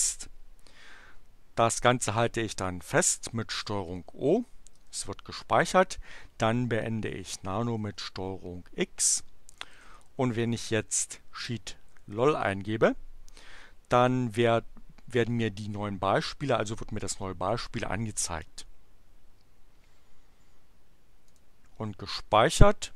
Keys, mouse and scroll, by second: 3.9 ctrl+o, 4.7 Return, 7.8 ctrl+x, 9.3-12.8 typing, 13.9 Return, 21.2 click.